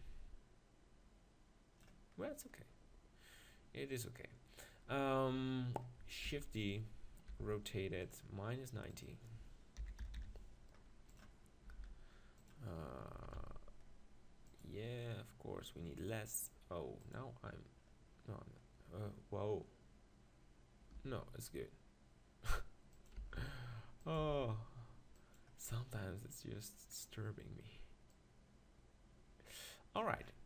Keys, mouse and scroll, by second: 6.3 shift+d, 6.7-8.5 drag, 7.3 r, 8.5 right click, 8.9-10.6 drag, 10.6 middle click, 11.7 g, 12.5-14.2 drag, 13.1 s, 14.6-18.9 drag, 21.0 g, 23.0-24.1 drag, 23.2 s, 24.1-26.3 right drag, 26.3 click, 26.5 right click, 28.1-30.0 drag, 30.2-30.4 middle drag.